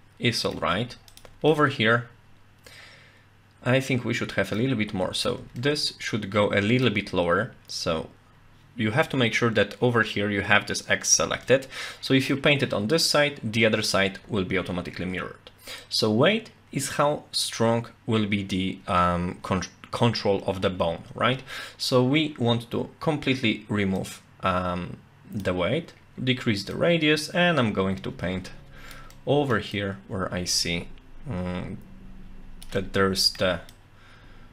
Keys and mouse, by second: 1.1 shift+click, 1.5-4.6 middle drag, 5.6-6.9 middle drag, 11.5 middle click, 15.9-17.5 drag, 24.0-25.4 drag, 26.7-28.9 drag, 29.1 middle click, 29.7-32.6 drag, 32.8 middle click, 33.7-34.5 drag.